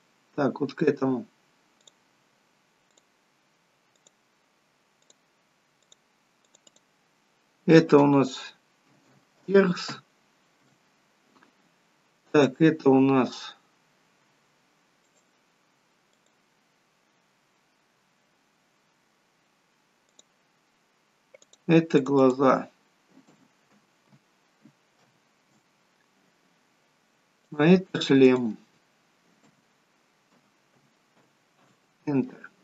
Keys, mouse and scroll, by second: 0.1 click, 3.2 click, 4.3 click, 6.1 click, 6.7 click, 7.1 click, 12.8 click, 14.3 scroll down 1, 15.3 click, 15.3-15.7 scroll down 1, 16.4 click, 17.4-18.6 scroll down 5, 20.4 click, 21.7 click, 27.7 click, 28.4 click, 28.6 click.